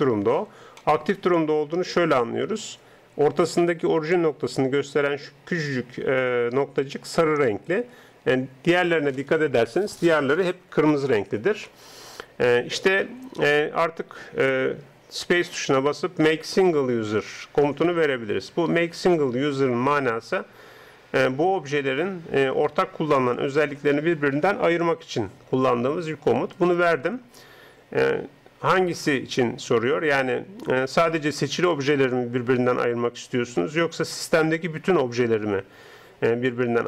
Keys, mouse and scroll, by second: 0.8-13.8 middle drag, 15.4 space.